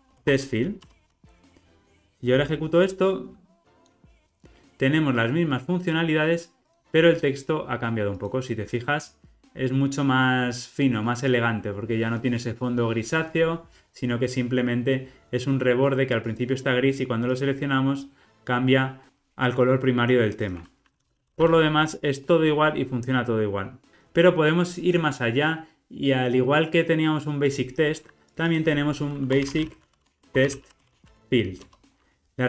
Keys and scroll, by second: 0.9 Return, 31.7 Return.